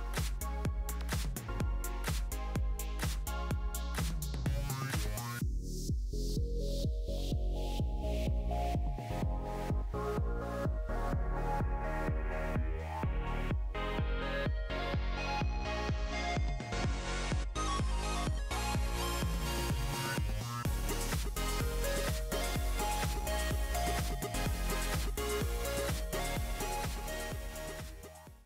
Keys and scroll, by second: 0.1 Return, 0.1 typing, 1.5 typing, 5.7 typing, 9.6 typing.